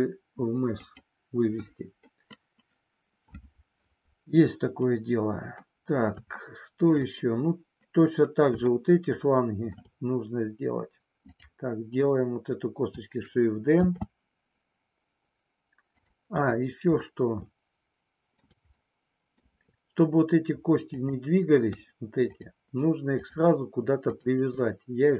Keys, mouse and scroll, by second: 0.8 click, 6.6 shift+middle click, 8.9 shift+middle click, 11.2 click, 13.8 shift+d, 16.0 click, 17.0-18.5 shift+middle drag, 18.9 shift+middle click, 21.0 click, 22.2 shift+click.